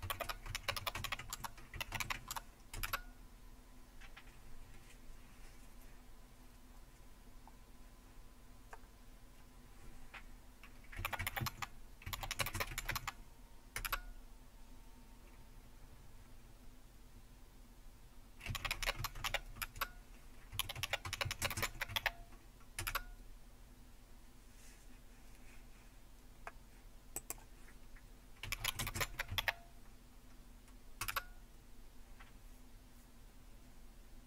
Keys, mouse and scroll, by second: 0.0-3.5 typing, 10.7-13.4 typing, 13.8 Return, 18.3-22.8 typing, 27.2-28.5 drag, 28.2-29.8 typing, 31.0 typing.